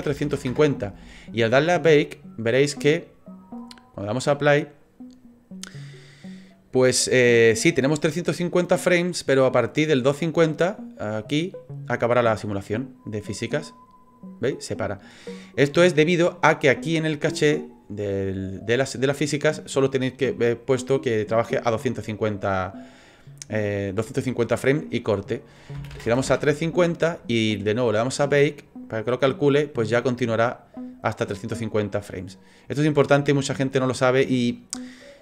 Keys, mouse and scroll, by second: 2.0 click, 3.5 click, 8.3 click, 15.4 click, 17.5 click, 22.6 click, 28.0 click, 29.9 click, 33.5 scroll down 4, 34.6 click, 34.6-35.1 scroll down 5.